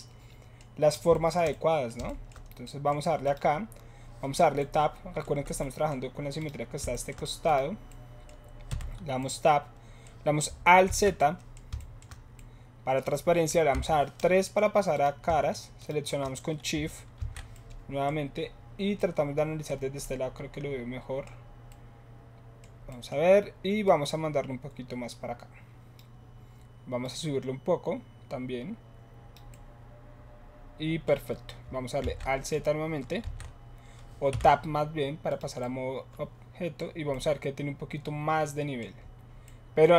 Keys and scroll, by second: 8.6 Tab, 10.8 alt+z, 13.7 3, 17.1 alt+shift+z, 32.0 alt+z, 33.2 alt+z, 34.2 Tab.